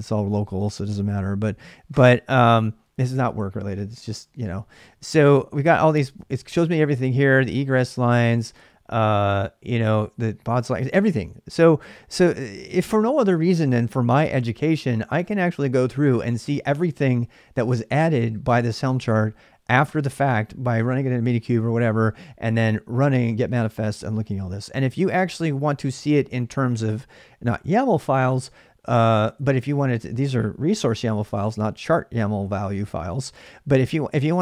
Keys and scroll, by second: 6.9 space, 24.9 space, 25.7 space, 29.7 space, 33.2-34.4 space.